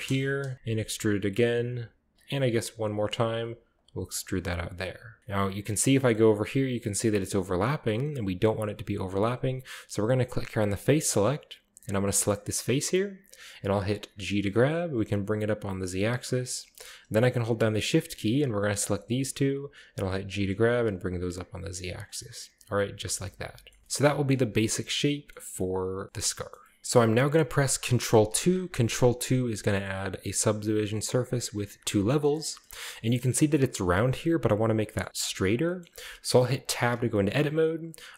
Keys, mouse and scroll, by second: 0.5 KP_7, 0.8 e, 2.1-5.4 typing, 2.2 click, 3.1-4.8 drag, 4.8 shift+middle click, 5.1 shift+click, 5.2-6.2 shift+scroll up 1, 10.4 click, 11.9-12.3 drag, 12.3-12.9 middle drag, 12.7 right click, 14.2-14.9 typing, 16.4 click, 16.7 middle click, 18.3-18.9 shift+right drag, 18.9-19.8 shift+middle drag, 20.3 g, 20.8 z, 21.9-22.2 drag, 22.2-23.0 scroll down 1, 22.2 middle click, 23.8-24.6 middle drag, 23.8-24.4 scroll up 1, 24.4-25.2 scroll down 1, 24.5 Tab, 25.3-26.8 middle drag, 25.4-26.8 scroll up 1, 28.3 ctrl+2, 28.9-30.9 middle drag, 29.7-30.6 scroll down 1, 31.3 click, 32.2 middle drag, 32.5-33.9 shift+scroll up 2, 33.1-33.9 shift+middle drag, 34.9-36.6 shift+middle drag, 36.7 Tab, 37.1-38.1 shift+middle drag.